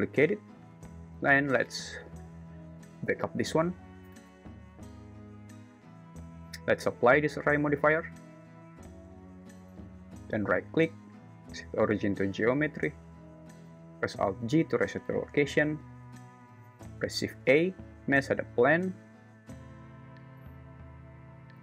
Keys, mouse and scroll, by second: 0.0 shift+d, 1.0 m, 4.1 Return, 5.0 1, 8.3 ctrl+a, 9.1 ctrl+a, 10.7-12.5 right drag, 14.4 alt+g, 17.2 shift+a.